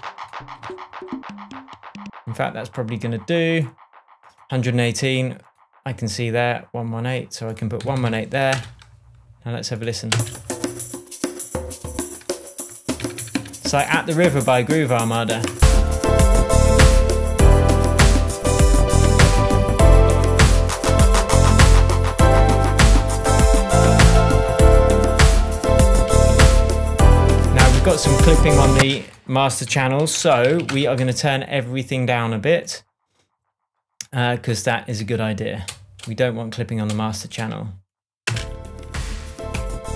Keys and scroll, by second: 0.5 Down, 7.5-8.5 typing, 10.1 space, 13.0 super+d, 19.2 shift+Tab, 27.5 space, 28.7 space, 29.4 super+space, 29.6 super+r, 30.1-30.9 typing, 38.2 shift+space, 39.5 Tab.